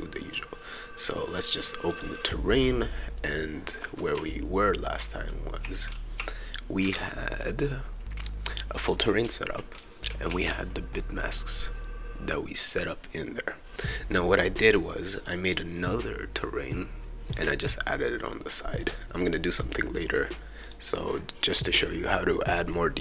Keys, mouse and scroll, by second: 1.9 click, 3.1-7.4 right drag, 4.4 a, 5.0 q, 5.9 w, 6.8 a, 8.6-11.7 right drag, 9.2 d, 9.8 e, 10.3 d, 15.3 click, 15.4 click, 18.8 click, 20.6 click.